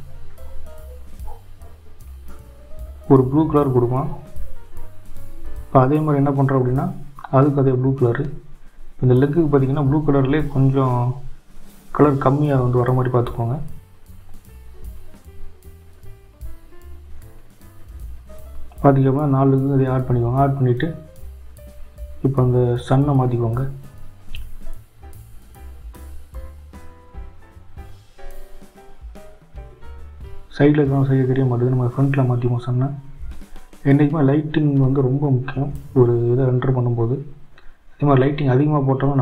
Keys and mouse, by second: 1.5 click, 7.2 click, 7.8 click, 9.2 z, 11.1 click, 12.6 click, 13.0 click, 14.4 click, 15.0 click, 16.0 click, 16.7 click, 17.2 click, 21.8 click, 22.2 click, 24.6 click, 25.9 click, 26.7 click, 27.3 click, 28.1 click, 29.4 click, 30.2 click, 31.0 click, 31.9 click, 33.1 click, 33.7 click, 35.6-37.0 drag.